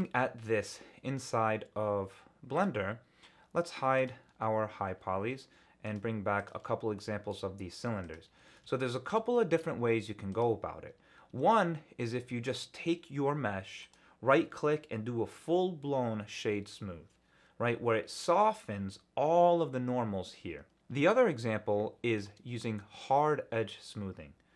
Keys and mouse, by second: 2.5 click, 3.9 click, 6.3 click, 6.9-7.3 shift+drag, 8.1 click, 8.5 ctrl+alt+z, 9.3 shift+middle drag, 10.4 click, 11.3 Tab, 12.2 Tab, 14.0-17.2 drag, 22.1 click.